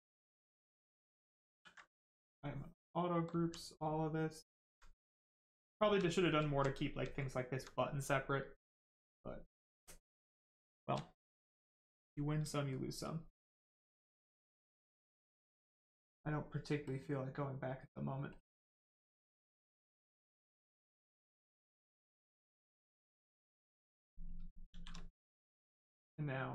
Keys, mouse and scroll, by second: 1.5 ctrl+w, 2.1 click, 2.9 right click, 3.4 alt+right click, 4.1 right click, 4.2 right click, 4.6 alt+right click, 5.3 right click, 5.4 right click, 5.5 shift+right click, 6.5 alt+right click, 7.1 alt+right click, 8.7 right click, 8.7 right click, 10.5 shift+right click, 11.0 alt+right click, 13.3 alt+right click, 16.8 click, 21.2 click, 24.0 right click, 24.7 shift+f, 25.7 click.